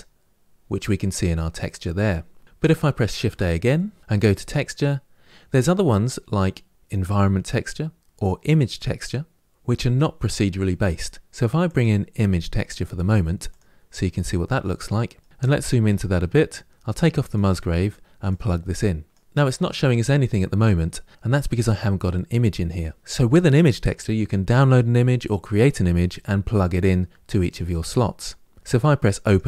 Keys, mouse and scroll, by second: 15.2 ctrl+z, 16.8 drag, 19.0 click, 19.2-29.3 middle drag, 29.3 click.